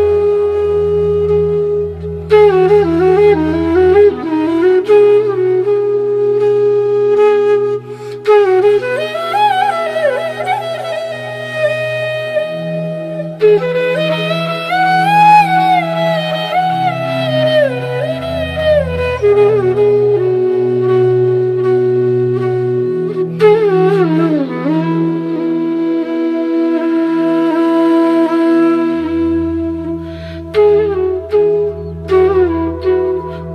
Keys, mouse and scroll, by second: 2.3 Home, 4.5 click, 7.8-11.3 drag, 12.6-14.6 drag, 16.9 right click, 17.7-28.5 drag, 28.5 alt+scroll up 1, 32.6 click.